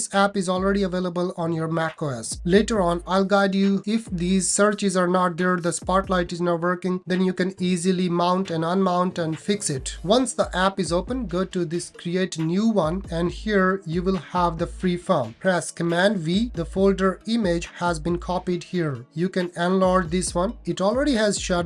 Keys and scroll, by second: 15.8 super+v.